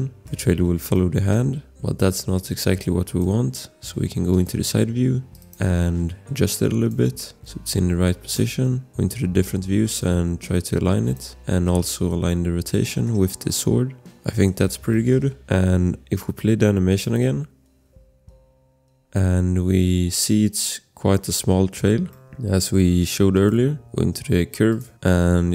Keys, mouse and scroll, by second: 0.0 scroll, 0.2 click, 0.2 click, 0.5 click, 0.5-0.9 scroll, 0.9 click, 1.3 click, 1.5 click, 1.9 click, 4.3 click, 5.3 scroll, 5.3 click, 7.1 shift+click, 11.9 click, 12.9 click, 13.0 click, 14.3 scroll, 14.4 click, 15.0-16.9 scroll, 15.1 click, 16.9 click, 21.7-22.0 scroll, 22.1 click, 22.2 scroll, 23.3 shift+click, 24.9 scroll.